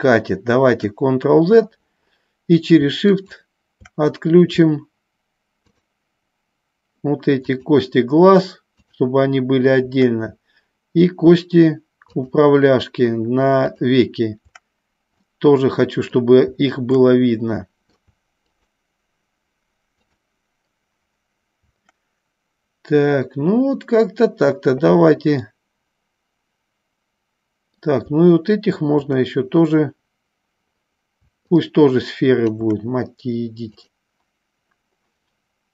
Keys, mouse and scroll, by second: 0.1 ctrl+z, 3.2 shift+click, 7.7 shift+click, 9.2 shift+click, 12.3 shift+click, 14.0 shift+click, 15.7 middle click, 17.5 middle click, 18.7 shift+click, 20.3 shift+click, 25.7-28.1 middle drag, 31.8 shift+click.